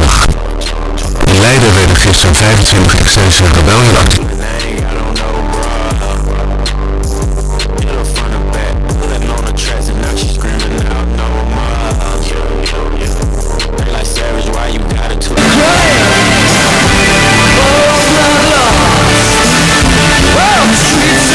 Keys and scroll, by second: 4.5 Page_Down.